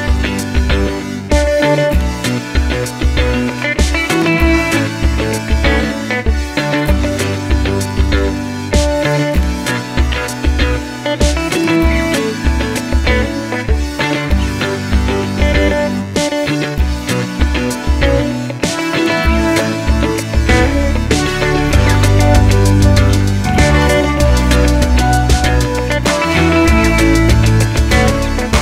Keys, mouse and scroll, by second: 1.2 g, 1.6 click, 1.7-4.4 middle drag, 2.9 g, 4.4 click, 4.5-5.8 middle drag, 5.4 g, 5.8 click, 5.9 middle click, 6.3 r, 6.8 click, 6.8 middle click, 7.5 click, 7.7-13.6 middle drag, 8.9 scroll up 1, 9.5-10.6 scroll down 1, 11.9 scroll down 1, 13.0-13.6 scroll up 2, 13.6 click, 15.9-16.8 middle drag, 16.8 click, 17.6 h, 18.3-20.7 middle drag, 20.7 click, 21.1-28.6 middle drag, 22.1 Tab, 25.8 l, 27.9 l.